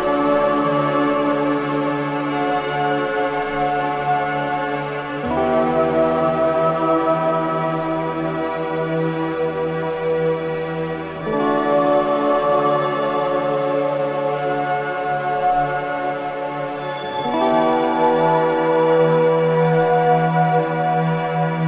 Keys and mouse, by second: 2.1 click, 4.0-5.7 drag, 8.0-10.7 drag, 10.7 Tab, 12.1-13.9 drag, 17.3 shift+a, 21.3 click.